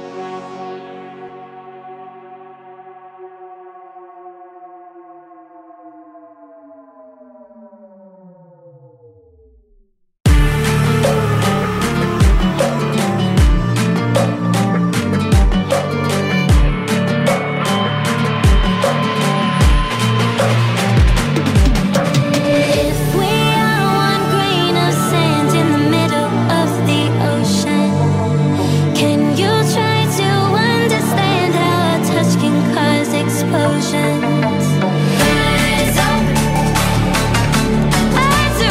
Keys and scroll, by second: 33.2 ctrl+e.